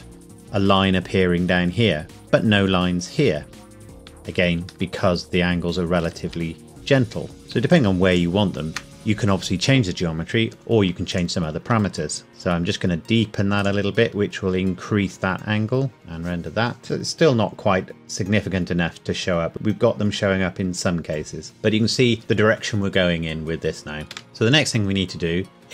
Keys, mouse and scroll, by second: 4.0 Escape, 4.9 middle click, 6.2 Tab, 7.4 click, 7.7 shift+click, 10.5 Escape, 11.1 alt+click, 12.3 g, 13.6 click, 15.9 F12, 24.1 Escape, 24.3 KP_0.